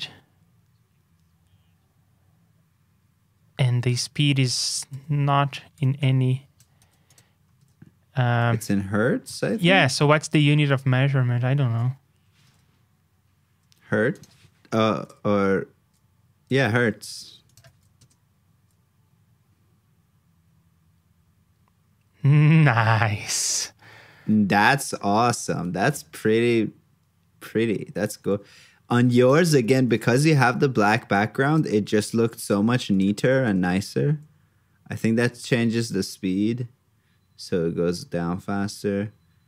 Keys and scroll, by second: 4.1 super+Tab, 6.8 super+c, 7.5 super+Tab, 12.4 super+Tab, 17.2 super+c, 17.6 super+v, 32.6 super+c, 33.1 super+v.